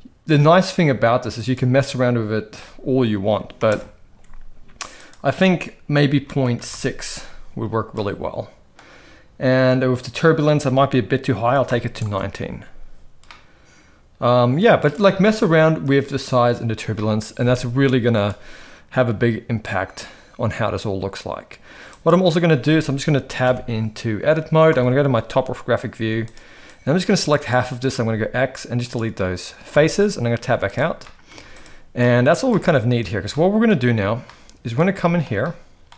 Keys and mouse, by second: 1.5-3.9 drag, 5.0-6.9 drag, 7.9-8.7 middle drag, 10.1-12.2 drag, 13.2-14.9 middle drag, 16.9-18.1 middle drag, 21.9 click, 23.7 Tab, 24.7 KP_7, 25.9 z, 26.8 click, 28.0 x, 29.8 Tab, 30.4 z, 31.0-31.6 middle drag, 31.3 z, 32.0-32.3 middle drag, 32.5 shift+middle drag, 33.3-33.7 shift+middle drag, 34.2-34.8 middle drag, 35.0 shift+middle drag, 35.4 middle click.